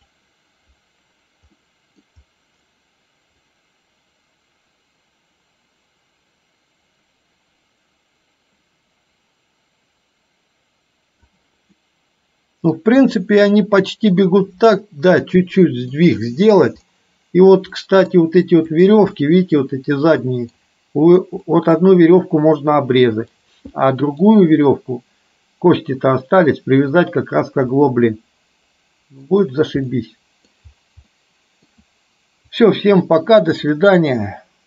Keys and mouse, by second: 1.6 middle click, 3.6-11.4 drag, 11.7-12.9 middle drag, 13.2-14.4 middle drag, 16.0-16.6 middle drag, 17.9 middle click, 18.7 click, 19.2-20.7 middle drag, 21.6 middle click, 22.9-23.4 middle drag, 23.9-24.4 middle drag, 27.9-29.2 middle drag, 30.0 middle click, 31.2 middle click, 32.6 click, 33.9 middle click.